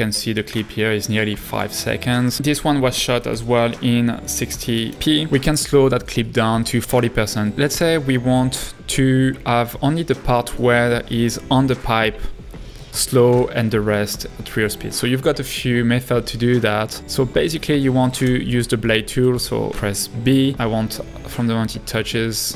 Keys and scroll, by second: 13.7 space, 18.2 b.